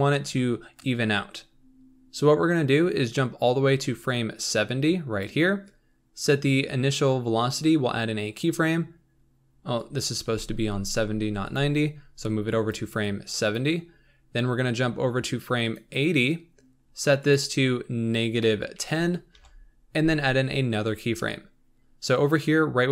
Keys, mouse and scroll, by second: 9.7 click, 10.4 g, 12.6-20.9 drag.